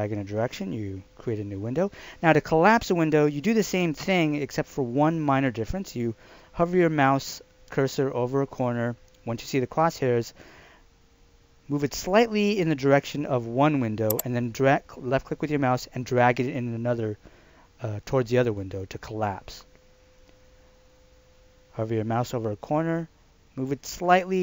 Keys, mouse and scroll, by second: 14.1 click.